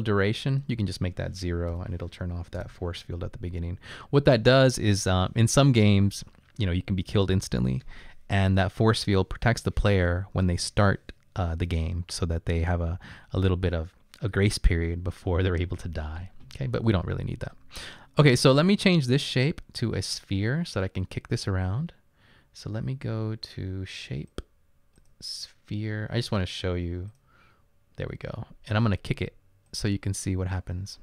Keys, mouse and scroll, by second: 1.7 0, 2.6 Return, 18.6 click, 19.2 click.